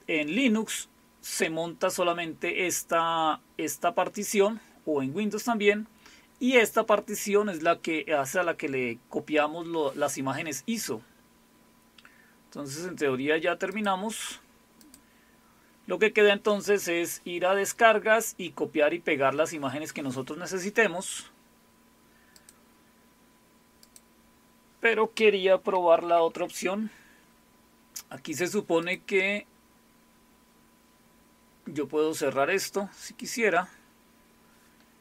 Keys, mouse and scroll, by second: 13.7 click, 14.8 click, 15.5 click, 22.4 click, 24.0 click, 26.0 shift+super+q, 28.8 click, 33.1 click.